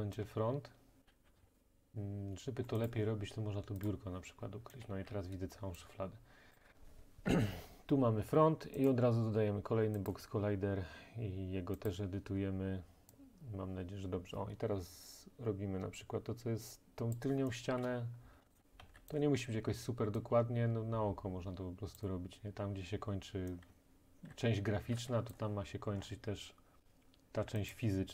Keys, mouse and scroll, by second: 0.3-1.0 a, 1.1 a, 1.1 w, 1.4 d, 1.5 click, 1.5 right click, 1.7-2.9 middle drag, 2.9 right click, 3.9 right click, 4.9 a, 5.8 right click, 6.6 right click, 8.9 right click, 10.1 click, 11.9 click, 17.2 click, 17.9-18.9 typing, 18.5 right click, 19.2 right click, 22.0 typing, 23.8-25.0 typing, 25.4 click, 26.0 scroll, 27.8 click.